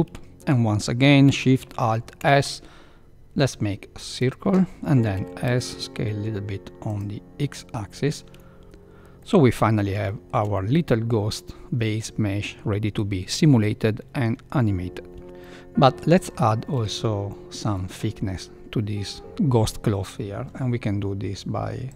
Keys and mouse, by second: 2.1 alt+shift+s, 5.1 s, 7.7 middle click, 9.1-9.5 middle drag, 10.0 shift+middle click, 10.5-12.5 middle drag, 15.2 n, 15.4-15.9 middle drag, 16.4 shift+middle drag, 17.3 middle click.